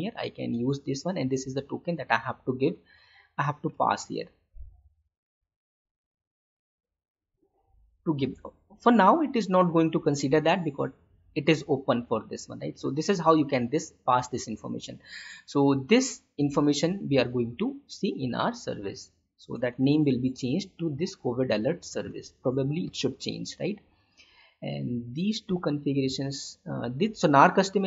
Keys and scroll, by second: 3.2 ctrl+c, 3.8 Tab, 5.3 ctrl+v, 7.2 ctrl+/, 10.2 ctrl+/.